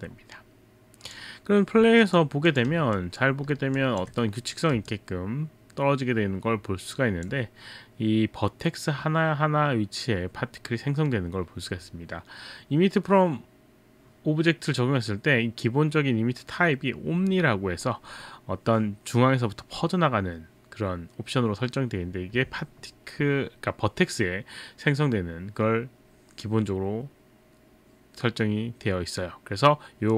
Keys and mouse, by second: 1.1 click, 2.1 click, 2.5 click, 3.0 alt+click, 3.8 alt+click, 4.9 alt+click.